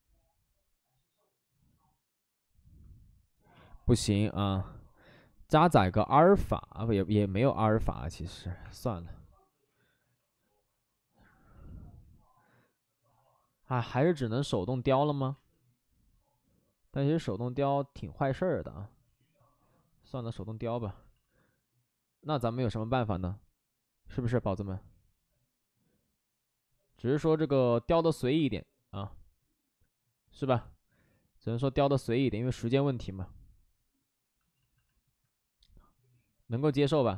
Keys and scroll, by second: 3.5 ctrl+z, 4.1 ctrl+z, 8.6 Escape, 10.0 Escape, 13.7 ctrl+z, 13.9-15.0 typing, 21.2 alt+s, 22.5 alt+s, 27.2 ctrl+z.